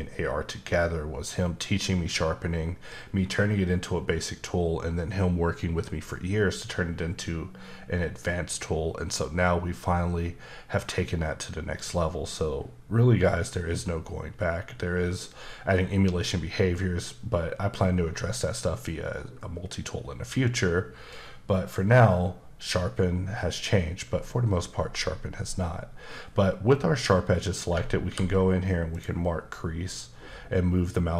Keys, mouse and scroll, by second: 28.1 ctrl+e, 28.9 click.